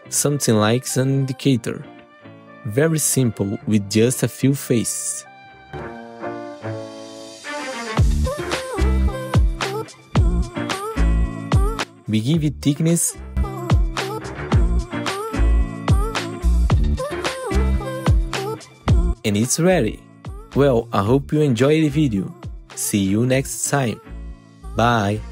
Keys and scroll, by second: 3.1 F4, 4.4 F4, 8.2 F4, 17.1 F4, 18.7 F4, 21.0 ctrl+alt+x, 22.1 e, 22.7 w.